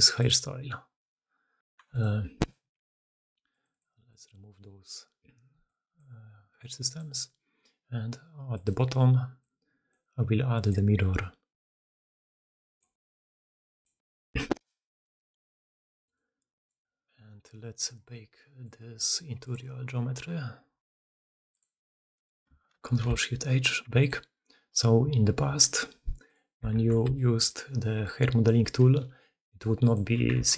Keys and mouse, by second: 0.1 middle click, 1.8 alt+middle click, 3.3 middle click, 4.1-6.4 middle drag, 6.9-8.5 middle drag, 9.7-10.5 middle drag, 12.8 middle click, 15.0-16.5 middle drag, 18.6 middle click, 20.3-21.4 middle drag, 21.4 click, 22.7 ctrl+shift+h, 26.1 click, 26.7 alt+a, 27.0 b, 28.8 g, 30.3 alt+a.